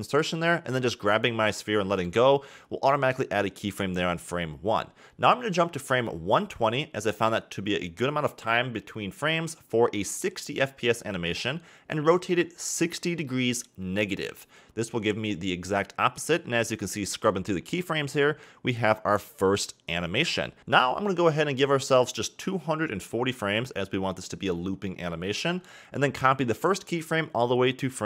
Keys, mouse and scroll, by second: 0.0 click, 0.3 g, 2.0-3.6 scroll up 4, 2.1 middle click, 3.6 a, 3.8 a, 5.3-6.2 scroll down 4, 7.3-8.5 drag, 8.5-9.9 scroll up 4, 9.9 r, 15.7-18.2 drag, 18.2-19.1 scroll down 9, 21.9 click, 23.0 shift+d, 25.9-28.0 drag.